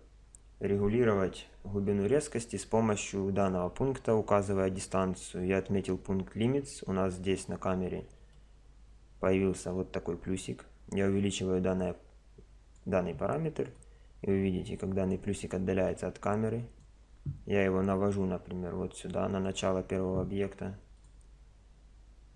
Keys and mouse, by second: 0.0 Escape, 1.7 KP_0, 7.2-11.0 middle drag, 11.0 click, 13.8 click, 15.9-19.3 drag, 19.3 click, 21.0 click.